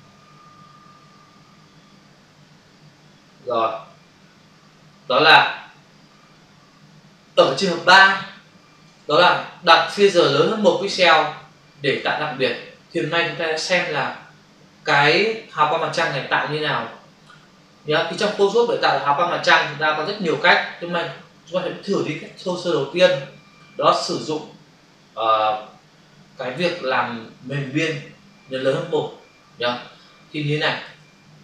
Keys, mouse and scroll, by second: 2.0-3.0 scroll up 1, 3.0 scroll down 1, 5.0-5.4 scroll down 1, 6.0 scroll down 1, 30.9 alt+Tab.